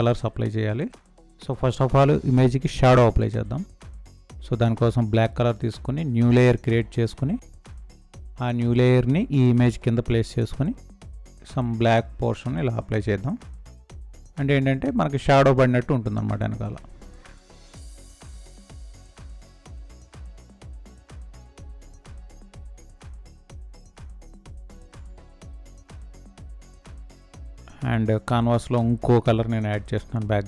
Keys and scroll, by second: 24.7 space.